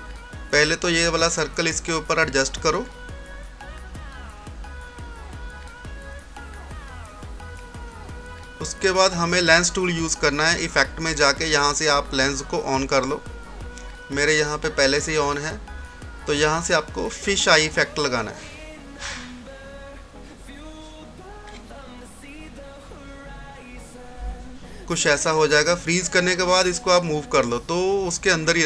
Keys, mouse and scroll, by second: 10.9 click, 14.8 click, 18.7 click, 23.2 click, 24.3 scroll down 1, 24.9-26.7 drag, 26.7 scroll up 1.